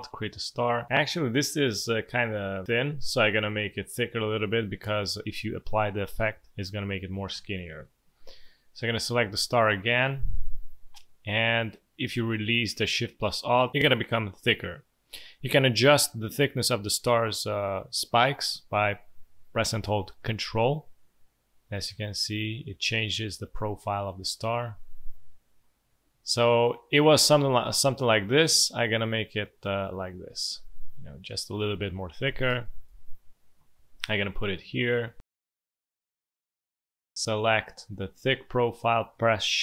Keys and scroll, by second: 7.3 Delete, 32.2 v, 32.4 space, 35.3 space.